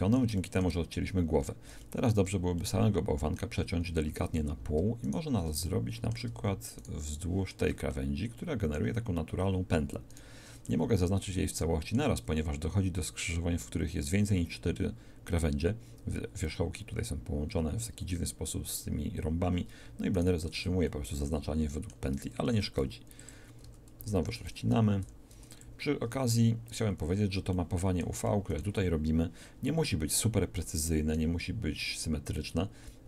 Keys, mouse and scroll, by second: 4.1 shift+a, 5.8-6.8 drag, 20.9-22.3 alt+shift+middle drag, 22.5 ctrl+alt+shift+e, 23.7 a, 24.0 a, 25.1 u, 27.1 middle click.